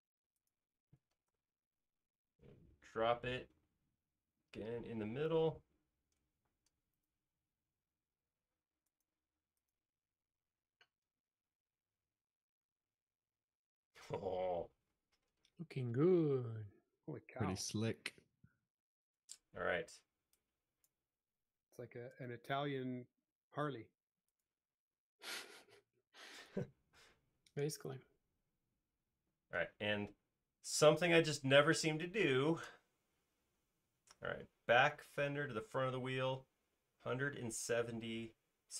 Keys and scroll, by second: 6.6 m, 9.4 space, 25.8 m, 31.9 space.